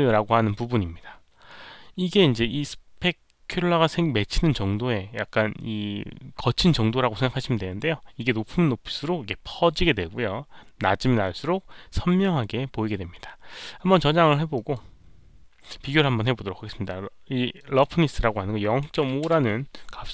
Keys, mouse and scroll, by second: 14.5 click, 17.5 click, 18.8 KP_Decimal, 18.9 KP_5, 19.2 Return.